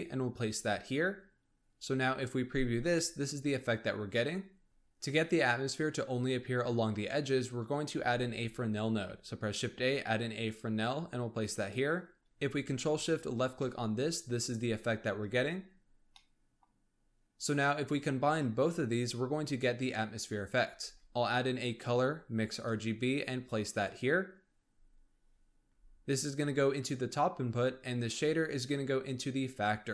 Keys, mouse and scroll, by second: 2.9-4.7 middle drag, 8.0 shift+a, 12.9 ctrl+shift+click, 16.0 middle click, 16.9-18.6 scroll up 1, 20.8 shift+a, 28.1 click.